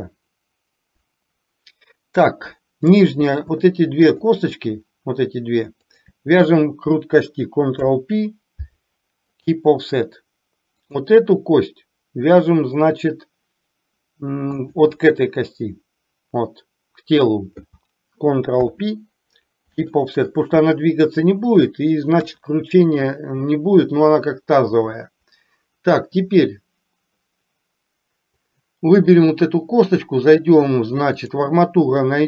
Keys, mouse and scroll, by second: 2.9 click, 4.0 shift+click, 5.9 shift+click, 7.8 ctrl+p, 11.0 click, 18.6 ctrl+p, 22.3 KP_1, 28.4 click, 31.3-32.2 drag.